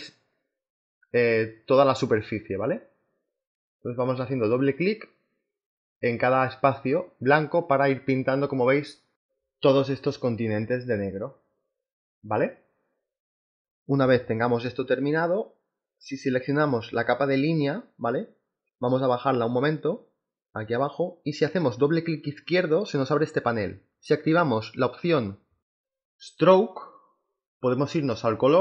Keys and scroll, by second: 0.7 g, 10.6 ctrl+z, 12.3 space, 13.0 space.